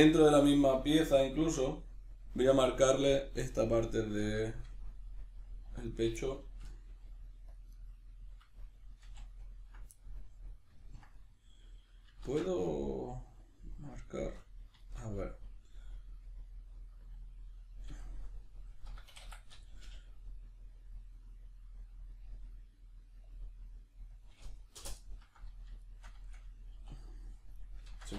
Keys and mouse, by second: 4.1-5.8 middle drag, 5.7 1, 5.8 right click, 6.0-7.8 middle drag, 6.9 g, 7.6 click, 7.8 right click, 7.9-14.9 middle drag, 9.0 ctrl+z, 12.2 ctrl+z, 17.9-27.7 middle drag, 17.9 r, 26.8 e, 27.7 right click, 27.9 ctrl+z.